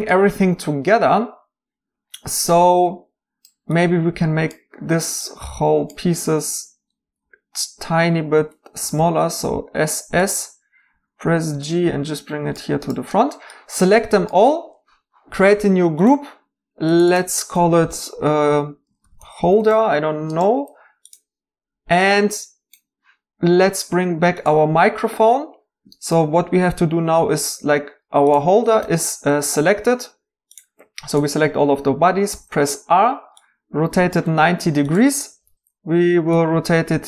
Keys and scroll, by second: 7.0 g, 7.2 g, 8.1 Escape, 10.9-11.6 typing, 19.0-19.5 typing, 28.8 r, 32.3 r, 35.4 typing, 35.5 ctrl+r.